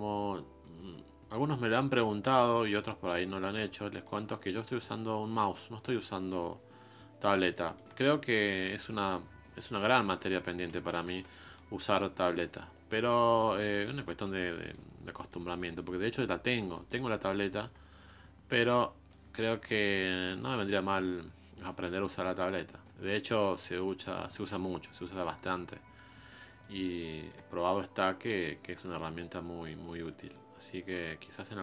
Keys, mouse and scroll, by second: 3.7 middle click, 4.5-7.5 ctrl+drag, 7.5-8.9 middle drag, 8.9-10.3 ctrl+drag, 10.3 middle click, 10.6 scroll down 1, 10.8 f, 11.5-14.5 ctrl+drag, 14.5 middle click, 15.5-16.5 scroll up 1, 16.7 middle click, 17.0-18.0 scroll up 1, 18.0-19.9 drag, 19.9 scroll down 2, 20.1-21.4 middle drag, 21.4 scroll up 1, 21.6-23.8 middle drag, 23.8-26.6 drag, 26.6-28.0 middle drag, 28.0-28.4 scroll up 1, 28.4-31.4 ctrl+drag.